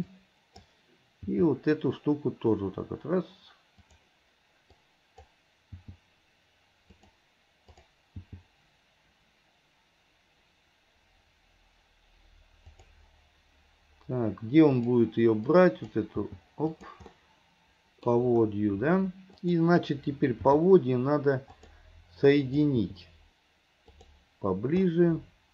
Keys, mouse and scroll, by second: 0.2 click, 1.2 g, 4.8-5.3 drag, 5.8 g, 7.7 click, 8.3 g, 15.6-16.0 drag, 16.2 g, 17.2-18.5 middle drag, 19.5 click, 20.5 g, 22.5 click, 22.8 g, 25.0-25.5 middle drag.